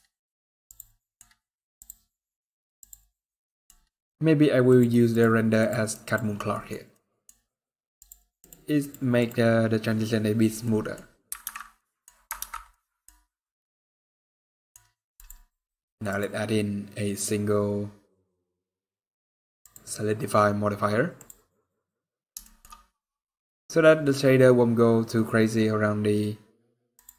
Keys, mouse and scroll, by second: 0.4 click, 0.8 middle click, 1.5 click, 1.8 scroll up 3, 2.6 click, 3.2 middle click, 4.5 click, 4.9 click, 5.6 click, 6.2 click, 6.3 middle click, 6.6 middle click, 7.1 scroll up 2, 7.8 click, 9.5 click, 9.5 scroll down 1, 10.4 middle click, 10.8 scroll down 3, 11.3 alt+a, 11.4-11.9 scroll down 3, 11.5 middle click, 13.8 ctrl+s, 13.8 middle click, 14.2-14.6 scroll up 4, 14.3 middle click, 14.9 click, 16.8 click, 19.4 click, 22.2 shift+middle click, 22.4-22.9 scroll up 3, 22.9 scroll down 1, 23.2-23.7 scroll up 4, 25.3 scroll up 4, 26.7 click.